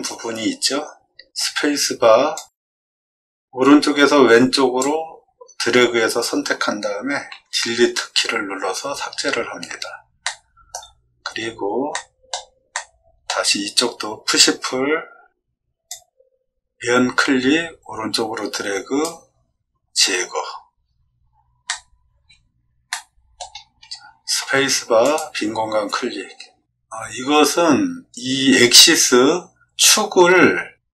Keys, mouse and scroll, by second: 1.3 space, 2.3-4.7 drag, 8.8 scroll down 2, 10.2 shift+middle click, 11.1 middle click, 11.2 middle click, 11.9 middle click, 12.6 middle click, 15.8-19.0 drag, 20.8 scroll down 2, 21.6 middle click, 22.0 scroll down 1, 22.8 shift+middle click, 24.3 space.